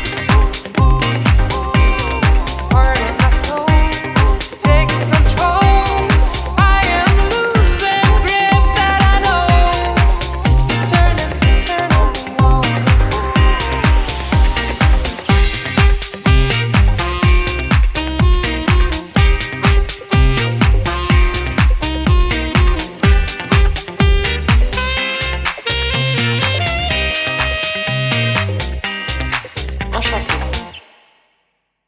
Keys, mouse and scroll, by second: 3.0 ctrl+l, 5.1-5.8 scroll up 9, 5.7 click, 6.0-6.5 scroll down 1, 6.7 click, 6.7 scroll down 2, 8.4 scroll down 2, 8.6 middle click, 9.1 scroll up 1, 9.9 click, 10.4 scroll down 1, 10.9 click, 11.6 scroll up 1, 12.4 shift+click, 13.6 ctrl+l, 14.5-15.0 scroll down 3, 14.8 click, 15.2 middle click, 15.8-16.6 scroll up 7, 16.6 middle click, 17.5-18.4 scroll down 3, 17.9 middle click, 19.4-19.9 scroll up 3, 20.0 click, 21.0 shift+click, 22.1 scroll down 4, 22.4 alt+l, 24.2 ctrl+l, 25.6 click, 26.0-26.3 scroll up 3, 26.6 scroll down 5, 27.0 middle click, 28.0 KP_1, 28.9 click, 29.5-30.1 scroll up 6, 30.5 click, 31.6-31.8 scroll down 2.